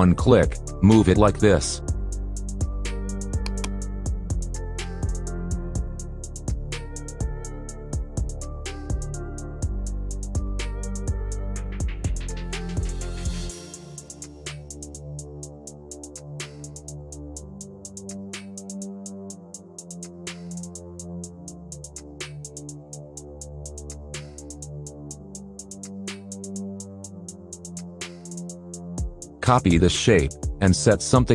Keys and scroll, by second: 10.9 KP_Add, 16.1 0, 16.5 Return, 20.0 ctrl+q, 26.5 ctrl+z.